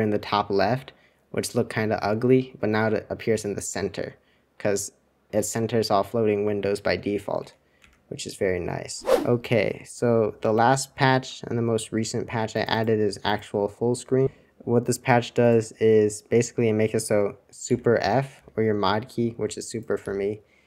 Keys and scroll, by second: 7.5 super+1, 7.8 super+2, 17.8 super+f, 18.3 super+f.